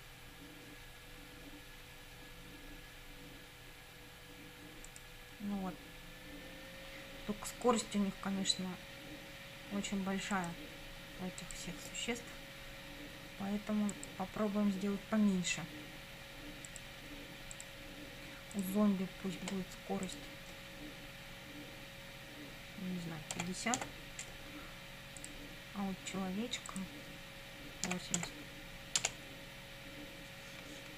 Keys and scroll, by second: 23.4 5, 23.8 0, 27.9 8, 28.2 0, 29.0 Return.